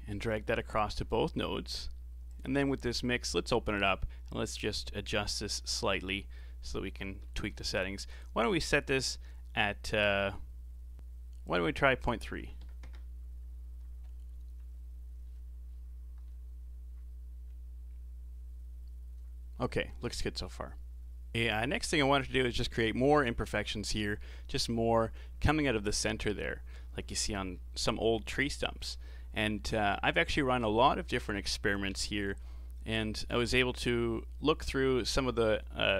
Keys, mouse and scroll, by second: 0.0 middle click, 0.8 click, 1.8 g, 2.7-3.8 scroll up 5, 3.8-4.9 drag, 4.9 scroll up 5, 6.0-9.1 middle drag, 11.4-14.5 drag, 18.2-18.6 scroll down 3, 21.3-23.8 middle drag, 27.1 middle click, 27.5-27.9 scroll down 4, 27.9-29.6 middle drag, 29.6-29.9 scroll up 2, 29.9 middle click, 30.4-30.9 scroll up 3.